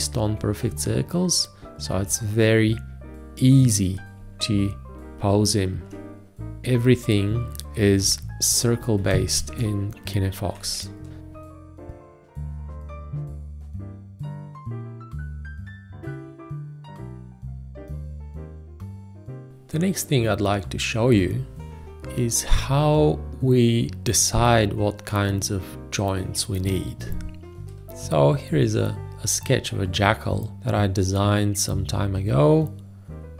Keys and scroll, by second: 8.9 Escape, 9.5 ctrl+space, 17.0 shift+1, 19.4 space.